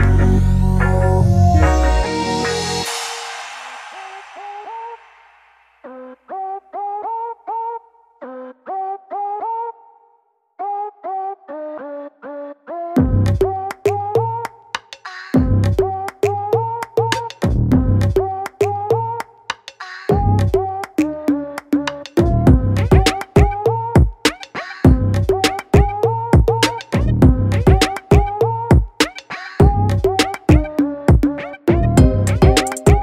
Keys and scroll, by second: 7.3 ctrl+t, 24.0 ctrl+j, 26.6 ctrl+t.